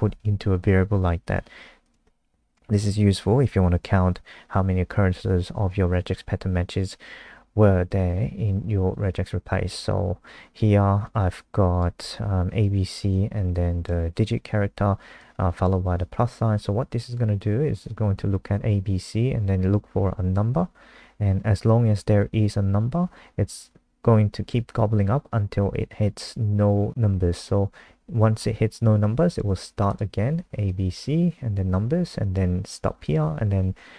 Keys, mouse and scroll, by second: 2.4 Down, 2.7 ctrl+Right, 3.2 ctrl+shift+Left, 11.0 click.